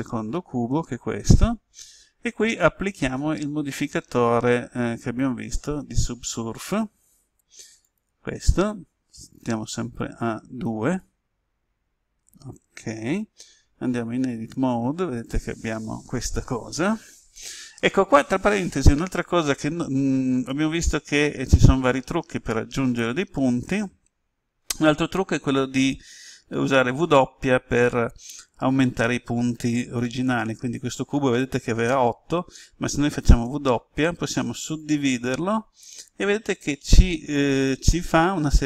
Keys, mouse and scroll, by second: 0.4-1.3 scroll down 1, 4.9 click, 14.1 Tab, 33.4 w, 34.5 click.